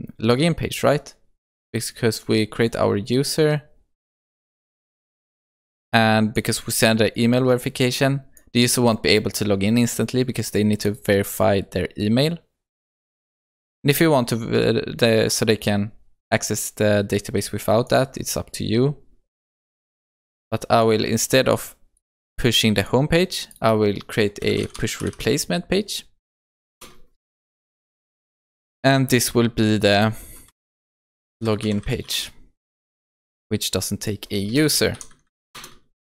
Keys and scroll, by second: 26.8 Return, 35.6 alt+Return.